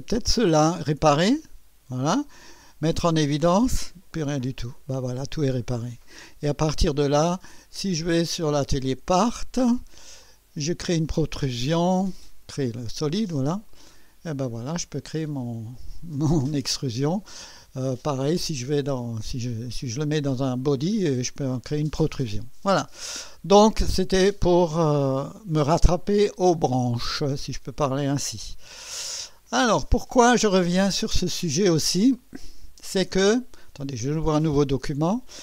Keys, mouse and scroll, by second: 0.1 click, 1.4 click, 3.1 click, 5.9 click, 8.0 click, 8.8 click, 10.2 click, 13.7 click, 14.8-16.7 drag, 19.5 scroll down 1, 19.7 scroll up 1, 20.1 right click, 27.0 click, 29.6 click, 33.3 click.